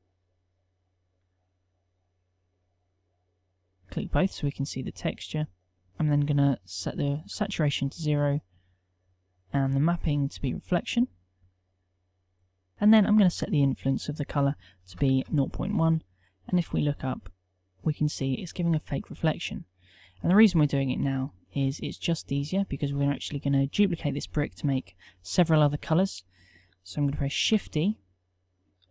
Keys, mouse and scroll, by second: 27.6 shift+d.